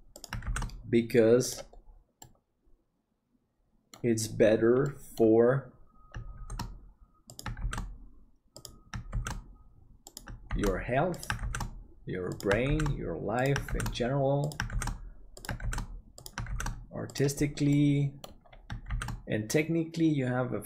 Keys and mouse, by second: 2.3-3.9 middle drag, 4.8 middle click, 6.3 shift+d, 17.8 middle click.